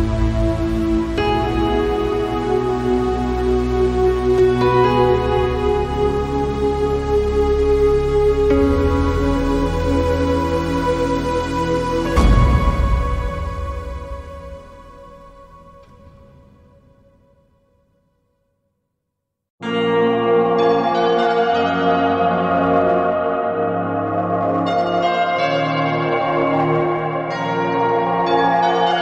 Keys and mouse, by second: 8.5 click, 12.2 click, 20.3 click.